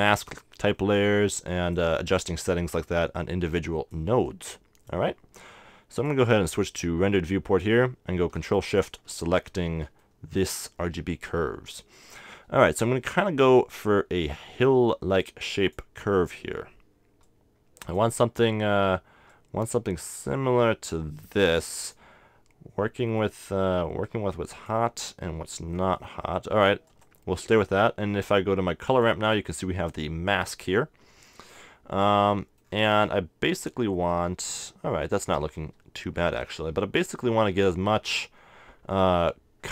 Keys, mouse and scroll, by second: 1.5-3.3 drag, 3.6-5.9 drag, 6.0-7.7 drag, 8.6-10.0 drag, 10.0-12.6 middle drag, 12.6-16.2 drag, 17.2-19.1 drag, 19.3-21.0 drag, 21.4-25.9 drag, 25.9 middle click, 26.9-30.3 drag, 30.3 middle click, 31.1 middle click, 32.0-33.8 middle drag, 34.1-35.7 middle drag, 35.7 KP_0, 37.5-39.4 scroll up 1.